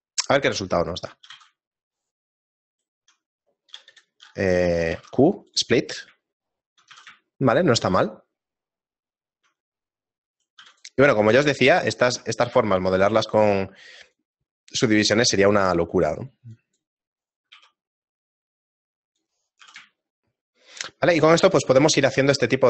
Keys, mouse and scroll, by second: 1.4 g, 2.2 shift+middle click, 2.8 shift+right click, 4.9 q, 6.3 shift+middle click, 7.0 a, 7.3 shift+middle click, 10.4 right click, 10.6 x, 11.5 right click, 11.8 shift+middle click, 12.3 right click, 12.9 q, 17.2 right click, 17.6 q, 19.6 a, 20.0 shift+middle click, 22.0 shift+middle click.